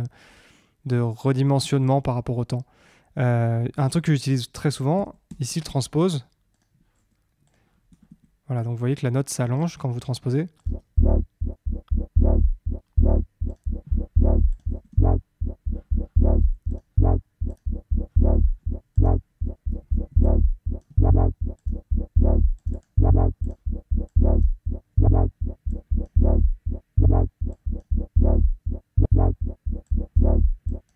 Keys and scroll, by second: 4.9 Down, 7.8 Down, 10.8 space, 15.0 Up, 19.8 super+d.